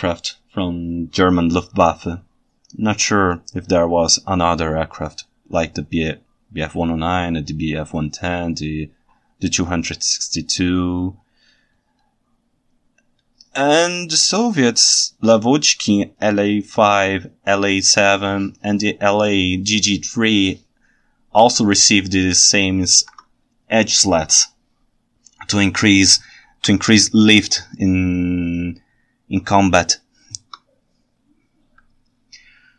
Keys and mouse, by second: 21.9-23.0 ctrl+shift+middle drag, 26.7 KP_1.